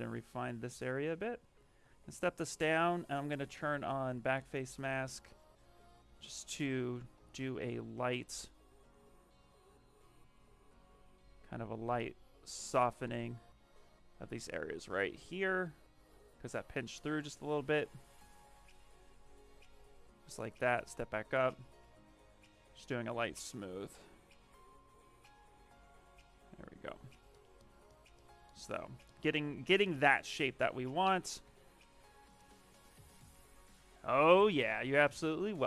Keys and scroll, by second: 1.7 shift+d, 2.0 shift+d, 6.8 ctrl+z, 12.9 d, 20.6 d, 31.3 d.